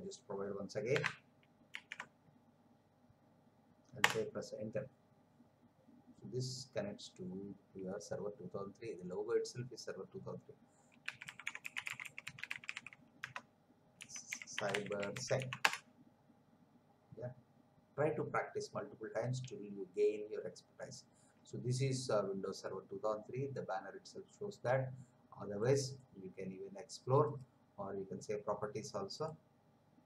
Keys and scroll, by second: 0.9 BackSpace, 1.7 ctrl+v, 4.0 Return, 10.8-15.8 typing.